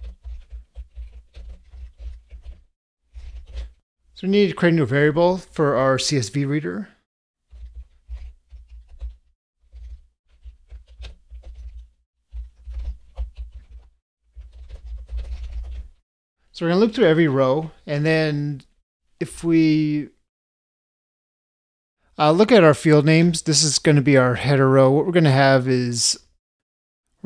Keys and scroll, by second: 9.0 ctrl+space.